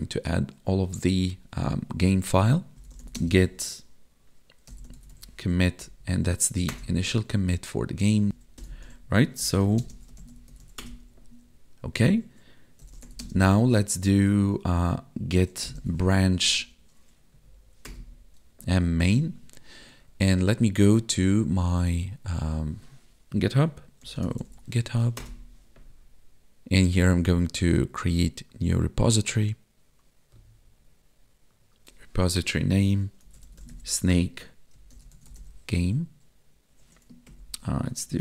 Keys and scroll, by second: 3.1 space, 5.8 Down, 8.6 ctrl+l, 9.8 space, 13.2 space, 16.4 Left, 17.3 Down, 37.3 ctrl+Left.